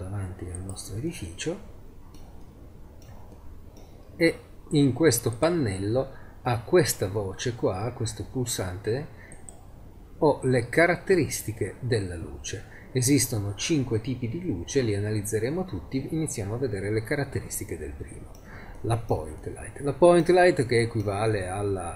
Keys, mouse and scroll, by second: 1.1 click, 1.3 click, 1.4 click, 1.6 click, 1.9 middle click, 2.0-2.4 drag, 5.2-5.8 middle drag, 5.8-7.0 drag, 7.0-9.6 middle drag, 11.6-13.6 middle drag, 14.4-15.4 middle drag, 17.3-17.8 middle drag.